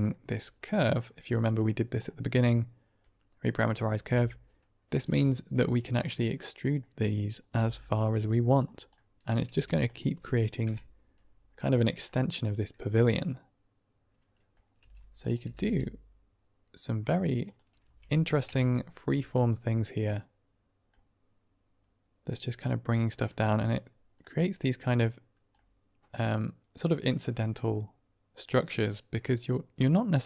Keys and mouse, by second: 0.0 click, 0.8 click, 1.3 click, 3.9 ctrl+space, 4.9 click, 5.5 middle click, 6.0 click, 6.7 click, 7.5 e, 8.4 click, 9.0 middle click, 9.0-9.4 typing, 9.8-10.9 drag, 10.9 Right, 12.0-14.5 middle drag, 14.7 g, 15.1 click, 15.3 r, 15.5 r, 17.3 click, 17.7 Tab, 18.7 Right, 19.3-20.8 middle drag, 22.2-23.1 middle drag, 24.3 middle click, 25.5-26.6 middle drag, 28.5-29.8 middle drag.